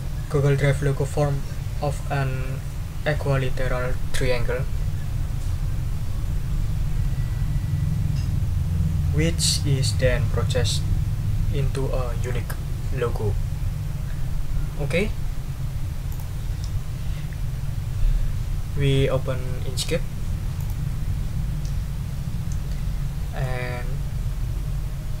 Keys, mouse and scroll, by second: 16.1 click, 20.6 click, 23.5-25.2 drag.